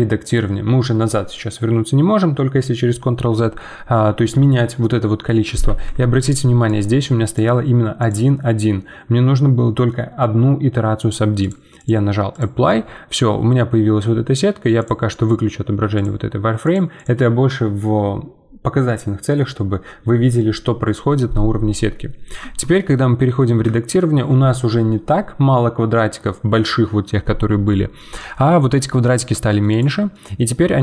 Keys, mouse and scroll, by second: 5.6 ctrl+z, 6.7-22.1 drag, 22.1 scroll down 2, 22.4 Tab, 22.7-26.9 middle drag, 28.0-29.7 middle drag, 29.7 click, 30.1-30.8 middle drag.